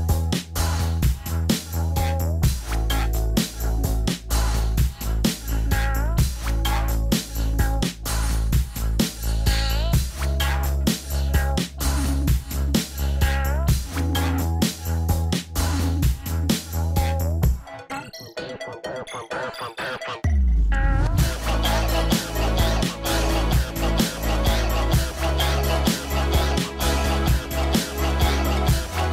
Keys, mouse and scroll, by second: 4.5 scroll down 1, 5.2 middle click, 5.6-7.5 scroll up 1, 10.2-10.9 scroll up 1, 11.2-11.8 scroll down 1, 26.2 scroll up 1, 26.7-28.7 scroll down 1.